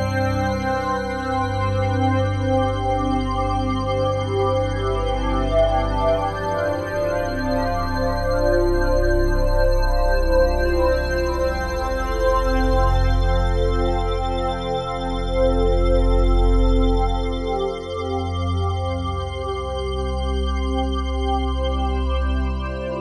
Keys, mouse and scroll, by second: 3.0 ctrl+l, 4.0-5.1 typing, 5.4 Return, 6.8 ctrl+s, 10.2-17.8 middle drag, 10.3-13.0 drag, 13.4 ctrl+alt+click, 14.0 alt+click, 14.3-22.2 ctrl+alt+drag, 22.7-23.0 right drag.